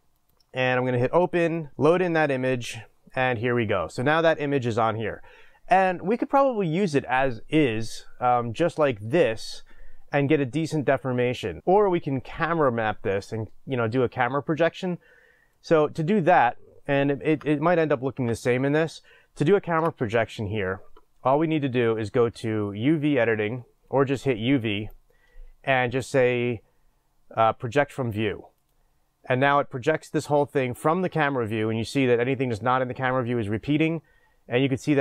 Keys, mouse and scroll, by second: 1.7 click, 17.4 Tab, 20.8 click, 25.2-27.7 drag, 28.7-35.0 drag.